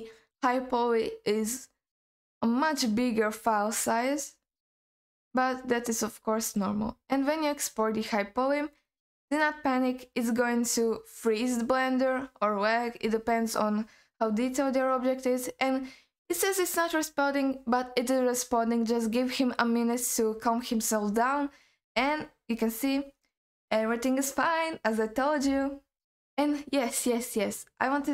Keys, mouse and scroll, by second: 22.7-25.9 scroll down 2.